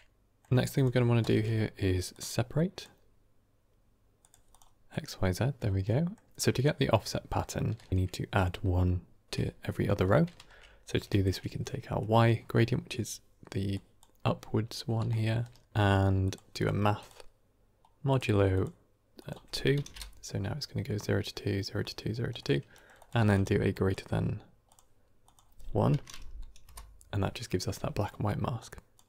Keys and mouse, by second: 0.0 shift+middle click, 1.1 shift+a, 4.8 click, 5.7 middle click, 6.2 g, 7.8 shift+middle click, 10.2 shift+a, 11.1 click, 13.5-15.6 typing, 13.6 drag, 16.9-18.1 drag, 18.5 click, 19.2-20.2 drag, 22.2 middle click, 22.6 middle click, 22.8 click, 23.1 shift+d, 23.6-24.7 drag, 25.1-27.0 drag, 27.9 middle click, 28.5-28.9 drag.